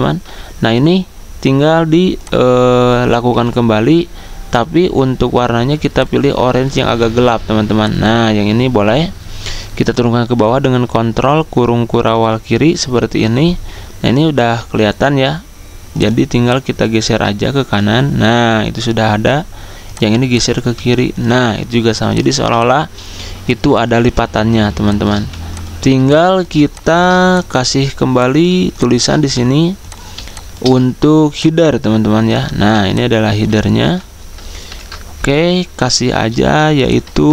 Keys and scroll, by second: 0.1 ctrl+z, 0.1 a, 3.3 v, 10.5 ctrl+[, 14.4 a, 18.5 typing, 22.8-23.6 typing, 29.2 v, 32.5 z, 33.9 v, 37.0 ctrl+a.